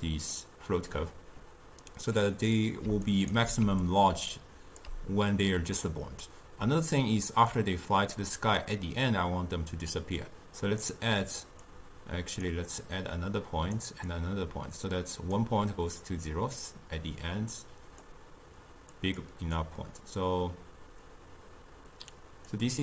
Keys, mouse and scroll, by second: 3.2 right click, 3.4 d, 3.9 click, 4.9 d, 7.6-22.7 drag.